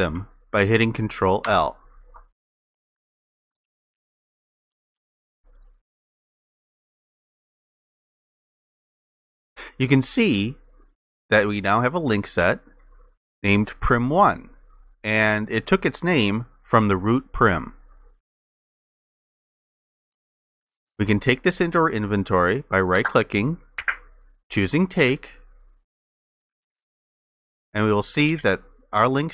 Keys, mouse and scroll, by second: 1.5 ctrl+i.